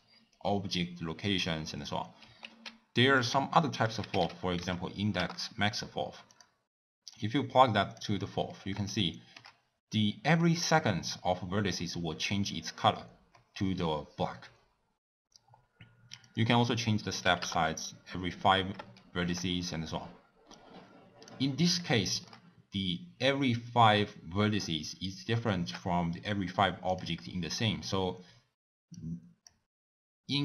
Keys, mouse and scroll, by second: 5.3 ctrl+a, 8.1-9.0 drag, 9.0-17.4 shift+middle drag, 17.4-19.1 drag, 19.1-20.6 shift+middle drag, 20.6-21.9 drag, 21.9-25.8 shift+middle drag, 25.8-26.2 scroll up 3, 26.2 scroll down 1, 26.3-27.0 scroll up 1, 27.0 click.